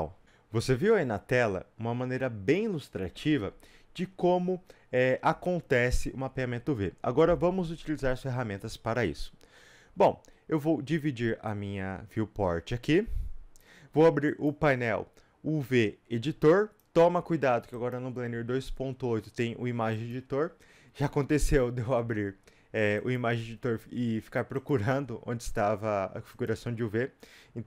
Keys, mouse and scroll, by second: 0.2 Return, 0.2-27.6 drag.